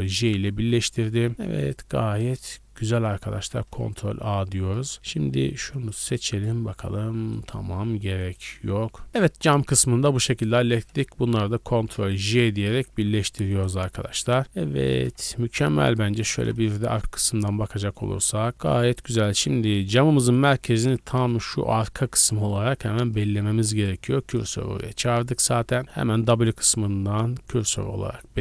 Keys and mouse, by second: 0.0 ctrl+j, 1.1 a, 1.3 a, 1.6 click, 1.6 right click, 1.6 g, 3.6 ctrl+a, 4.9-5.7 middle drag, 5.7 click, 5.9 middle click, 6.3 click, 6.4 middle click, 7.4 click, 7.4-9.1 middle drag, 7.8 g, 9.0 a, 9.1 right click, 9.1 a, 9.2-10.3 middle drag, 10.3 shift+right click, 11.6 ctrl+j, 11.6-12.9 ctrl+middle drag, 12.7 a, 12.9 a, 13.3 middle click, 13.5 right click, 13.6-15.5 middle drag, 15.1 Tab, 15.5 a, 15.7-18.5 middle drag, 16.3 shift+b, 17.6 Tab, 19.0 click, 19.7 Tab, 20.1 1, 20.4 click, 20.9 shift+s, 21.8 Tab, 21.8-23.7 middle drag, 22.2 w, 23.8-28.4 middle drag, 25.0 w, 26.1 w.